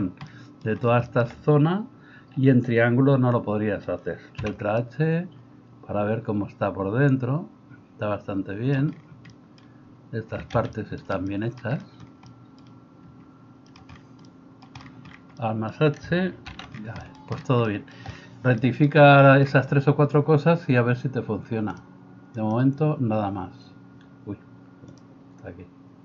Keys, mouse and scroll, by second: 4.4 h, 16.5 alt+h.